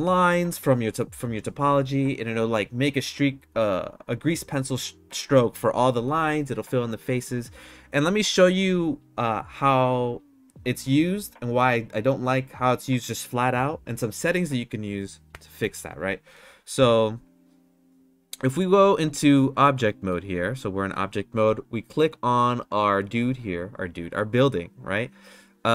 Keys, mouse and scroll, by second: 16.7 Tab, 19.7 middle click.